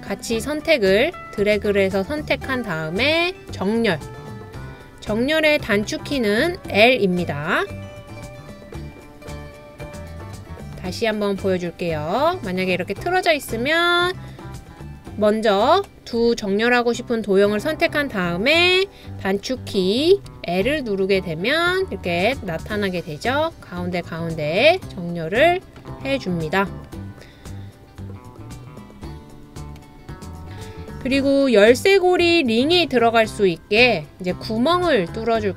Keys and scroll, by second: 20.1 super+space, 20.7 l.